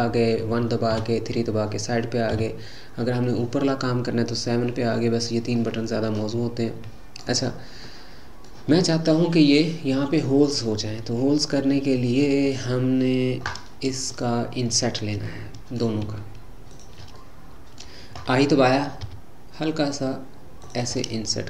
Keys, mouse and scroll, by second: 0.9 KP_3, 2.3 KP_7, 4.8-7.3 middle drag, 7.3-7.8 scroll up 3, 7.8-13.3 middle drag, 14.1 click, 15.3-16.7 middle drag, 16.7 shift+click, 17.2-19.1 middle drag, 21.0-21.4 middle drag.